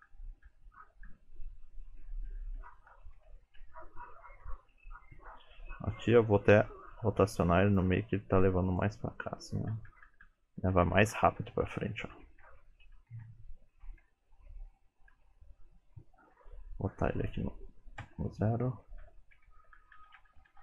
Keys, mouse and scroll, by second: 0.1 Left, 0.5 Left, 1.1 Left, 2.3 Left, 2.6 Left, 2.9 Right, 3.2 Right, 3.6 Right, 4.5 Right, 7.2 r, 8.0 g, 9.8-10.1 Left, 10.3 Left, 10.5 Left, 10.8 Left, 11.0 Right, 11.2-11.7 Right, 11.9 Right, 12.1 Right, 12.3 Right, 12.5 Right, 12.7 Right, 12.9 Right, 13.2 Right, 13.9 Right, 15.2 Left, 17.3 click, 19.1 Left, 19.4 Left, 19.6 Left, 19.8 Left, 20.0 Left, 20.2 Right, 20.4 Right.